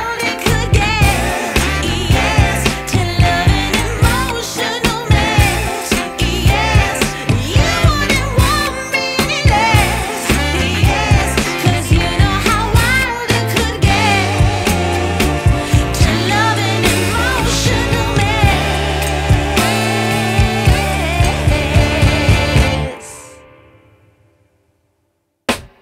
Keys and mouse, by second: 0.7 space, 0.8 click, 1.2 space, 1.4 click, 5.1 space, 6.0 click, 12.1 click, 14.8 click, 24.1 ctrl+click, 25.6 5.